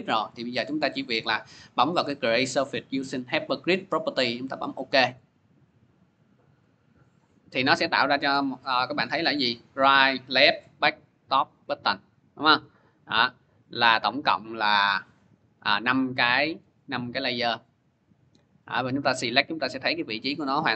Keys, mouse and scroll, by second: 4.7-5.9 drag, 8.2 click, 9.1 click, 10.0 click, 10.5 click, 11.0 click, 11.6 click, 12.9 click, 13.5 click, 14.5 click, 15.4 click, 16.0 click, 16.5 click, 16.9 click, 17.3 click, 18.8 click, 20.2 click.